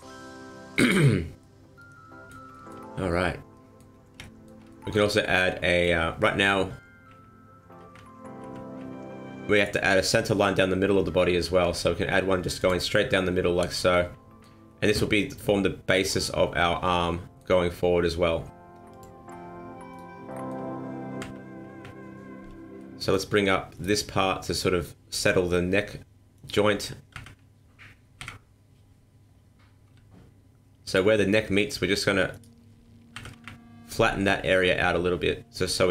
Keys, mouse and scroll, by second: 0.0 scroll down 2, 0.3 middle click, 1.1 scroll up 2, 1.4 middle click, 2.5 shift+middle click, 2.9 scroll up 1, 3.1 middle click, 4.2 shift+middle click, 4.7 middle click, 5.2 middle click, 6.5-8.8 typing, 11.7 ctrl+r, 12.9 middle click, 17.6-18.9 scroll up 1, 18.9 click, 19.9 right click, 20.3 middle click, 21.2 KP_1, 21.7 KP_3, 22.8 middle click, 23.7 right click, 25.2 click, 26.3 right click, 27.1 KP_1, 28.2 KP_3, 29.9 g, 31.2 middle click, 32.3 right click, 33.1 KP_1, 33.3 KP_3, 34.7 g.